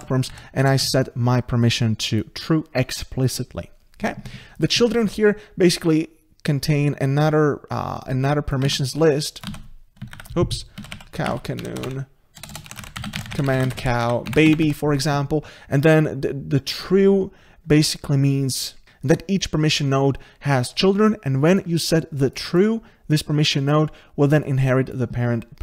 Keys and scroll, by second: 8.7 ctrl+c, 9.5 ctrl+v, 10.1 ctrl+z.